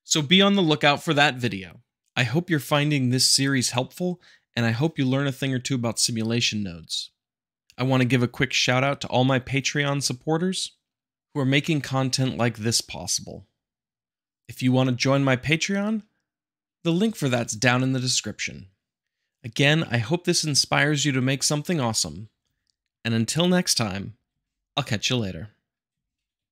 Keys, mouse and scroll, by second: 2.0-3.0 drag, 5.5 space, 8.3 click, 9.6 space, 13.9 space, 16.2-17.3 shift+drag, 17.7-19.4 shift+drag, 20.0-21.2 drag, 22.4 shift+Left, 23.9 shift+Left, 24.4 space, 26.0 space.